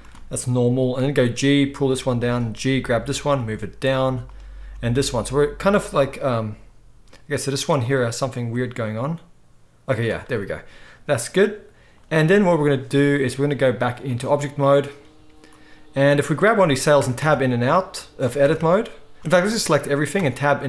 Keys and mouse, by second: 1.2 g, 2.2 click, 2.3-4.2 middle drag, 3.4 g, 4.2 click, 4.4-13.9 middle drag, 4.7 g, 6.2 g, 8.6 g, 13.9-16.3 drag, 16.3-18.3 middle drag, 17.0 Tab, 17.2 Tab, 18.3 click, 18.5 Tab, 18.5-20.6 middle drag, 18.6 Tab, 19.4 a, 20.5 Tab.